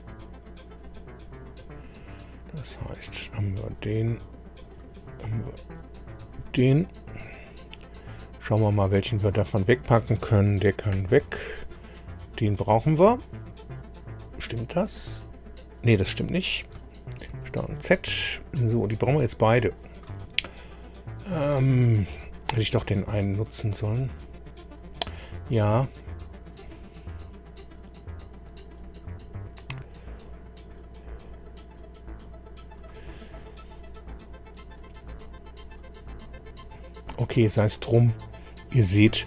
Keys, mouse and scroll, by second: 0.4 click, 0.9 scroll down 1, 1.5 click, 2.7 click, 4.6 click, 6.0 click, 7.1-7.4 scroll down 1, 8.1-8.4 scroll down 1, 8.8 click, 11.0 Delete, 11.6 click, 17.3 ctrl+z, 18.2 ctrl+scroll down 3, 34.6-34.9 scroll down 2, 38.1-38.5 scroll down 2.